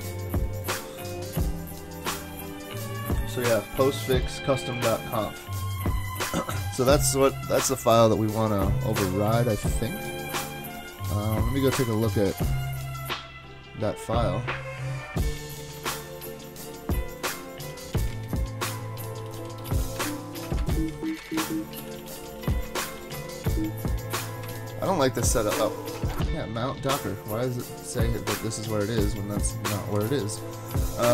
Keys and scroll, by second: 11.0 super+Tab, 11.9 super+Tab, 12.1 super+Tab, 15.2-15.8 typing, 17.4-23.5 typing, 21.8 ctrl+c, 24.2 ctrl+c, 24.4 super+Tab, 26.1 super+Tab, 27.0 super+Tab, 29.9 super+Tab, 31.0 super+Tab.